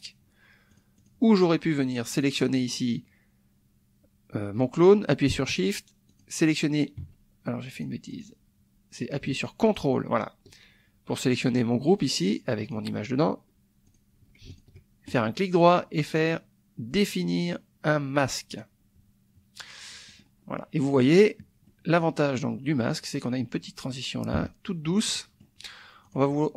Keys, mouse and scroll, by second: 0.7 click, 2.1 click, 6.1 shift+click, 7.8 click, 8.1 click, 9.7 ctrl+click, 12.6 click, 13.9 click, 14.5 ctrl+click, 15.2 ctrl+right click, 18.5 click, 20.1 click, 20.5 click, 21.6 click, 24.4 -, 25.1 click, 26.0 click.